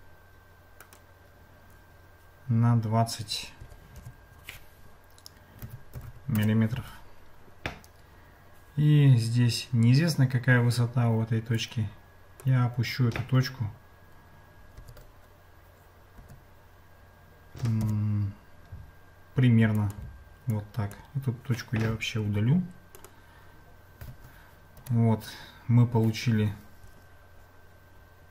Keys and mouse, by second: 3.6 g, 11.6 click, 14.8 g, 20.6 click, 24.8 Tab.